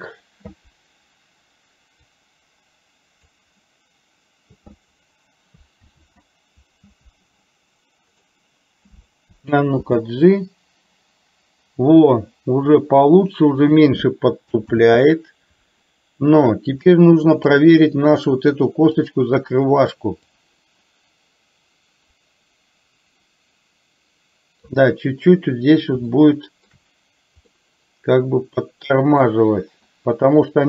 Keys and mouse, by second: 2.1-3.5 drag, 5.9 ctrl+z, 8.3 click, 14.9 ctrl+z, 17.1-17.8 middle drag, 18.4 middle click, 19.0-19.5 drag, 20.3-25.6 drag, 26.3-27.0 shift+middle drag, 27.6-29.5 middle drag.